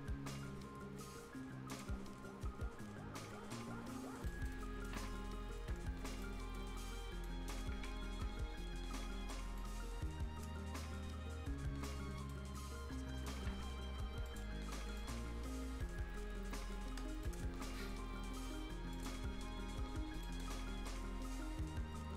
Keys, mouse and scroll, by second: 2.0-3.2 ctrl+scroll down 1, 4.3 ctrl+right click, 4.6-5.2 ctrl+scroll up 1, 6.2 ctrl+scroll down 1, 6.2 ctrl+right click, 6.7 ctrl+scroll up 1, 7.2 ctrl+right click, 9.4 ctrl+scroll down 1, 9.6-12.5 ctrl+right drag, 12.5-12.9 ctrl+scroll up 1, 14.3 ctrl+click, 16.7 ctrl+scroll down 1, 16.9 ctrl+Escape, 17.2 ctrl+right click, 18.9 ctrl+click, 19.3-20.0 ctrl+scroll up 1, 20.0 ctrl+scroll down 1, 20.2 ctrl+right click, 20.5 ctrl+scroll up 1.